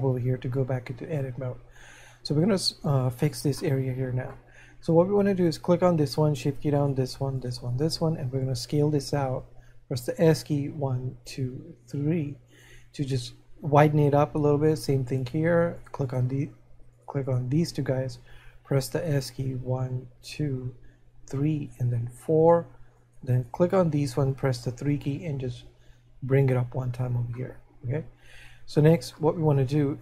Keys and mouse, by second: 4.7 middle click, 12.5 click, 24.4 3, 26.2 click, 27.5 middle click.